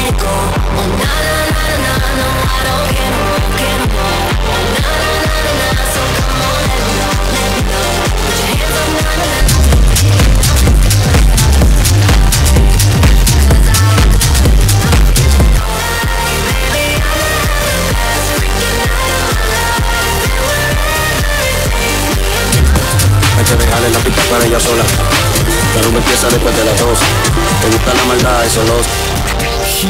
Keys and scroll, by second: 0.4 Down, 0.4 Return, 15.9 Page_Down.